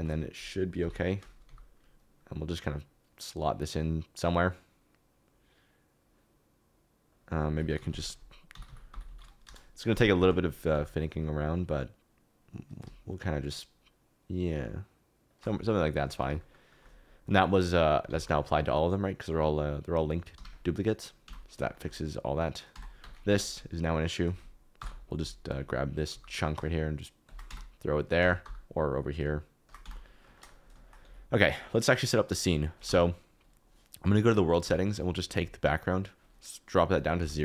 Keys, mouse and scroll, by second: 0.8 KP_7, 1.4 g, 7.7-9.0 typing, 9.4 Return, 10.7 g, 15.2 shift+click, 15.9 middle click, 16.3 shift+middle click, 18.0 g, 20.3 Escape, 21.2 Tab, 21.7 shift+middle click, 22.7 Tab, 23.0 1, 23.2 alt+z, 24.7 ctrl+l, 26.0 g, 27.2 shift+click, 27.4 Tab, 28.2 Tab, 28.4 g, 29.8 Tab, 30.3 shift+middle click, 31.0 alt+z, 32.7 click, 34.6 a, 34.7 KP_Decimal, 35.3 click, 36.1 click, 36.9 alt+click, 37.2 x.